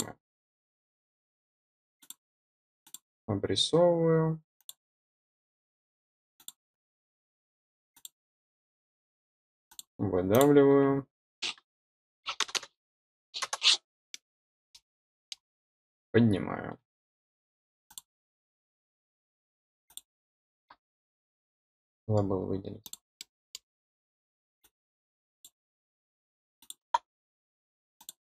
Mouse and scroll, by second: 1.9 click, 2.8 click, 4.5 click, 6.3 click, 7.9 click, 9.6 click, 10.2 click, 14.0 middle click, 15.1 middle click, 17.8 click, 19.8 click, 22.8 click, 23.1-23.5 middle drag, 24.5-25.4 drag, 26.5 click, 27.9 click.